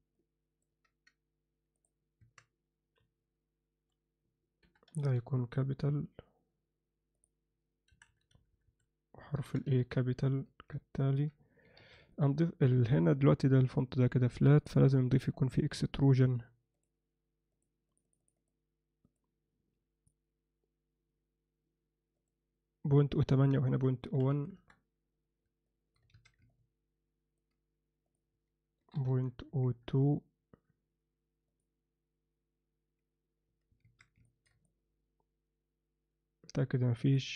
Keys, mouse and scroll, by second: 0.2-0.6 ctrl+middle drag, 2.2 Tab, 3.0 Left, 4.7 Left, 4.7 BackSpace, 5.1 shift+k, 7.9 Right, 9.4 BackSpace, 9.7 shift+a, 10.3 Tab, 11.0 ctrl+alt+middle click, 11.8 alt+a, 12.1-12.9 alt+middle drag, 14.6 click, 16.7 click, 17.9 click, 19.2 click, 22.2 click, 23.4-25.1 drag, 25.7 middle drag, 26.1 alt+a, 26.5-27.4 ctrl+alt+middle drag, 28.1-30.8 drag, 31.5 click, 33.8 alt+a, 34.3 ctrl+middle drag, 34.4 ctrl+alt+drag, 34.7-37.2 middle drag.